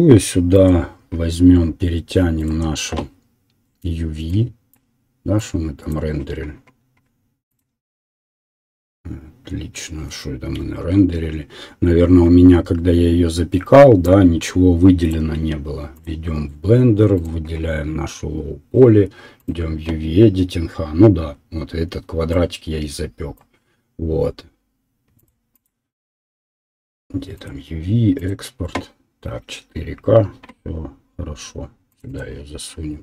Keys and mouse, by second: 16.2-19.4 middle drag.